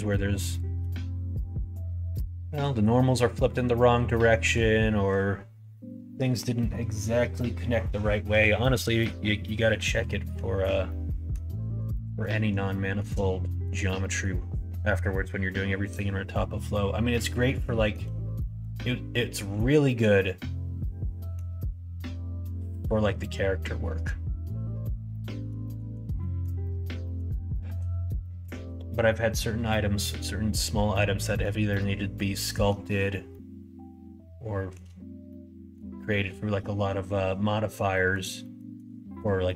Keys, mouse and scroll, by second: 0.4 middle click, 0.7 g, 2.9-4.5 middle drag, 10.0 middle click, 10.9 middle click, 12.0 middle click, 12.8 middle click, 13.5 shift+middle click, 14.0 middle click, 17.1 middle click, 17.8 shift+middle click, 18.4 middle click, 19.3 middle click, 19.9-21.3 middle drag, 25.1 middle click, 25.7 shift+middle click, 26.2 middle click, 26.6 middle click, 27.1 middle click, 27.5 shift+middle click, 28.3 middle click, 30.6 middle click, 31.8 middle click, 33.3-34.7 middle drag, 35.3 shift+middle click, 37.9 middle click, 38.0 click, 38.5 shift+click, 39.4 click.